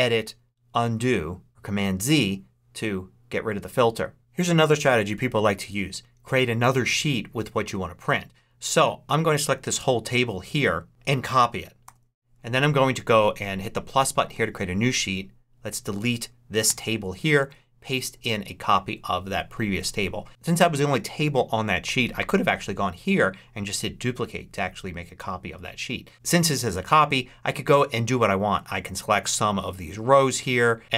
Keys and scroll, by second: 11.7 super+c, 16.5 BackSpace, 17.1 super+BackSpace, 17.3 super+v.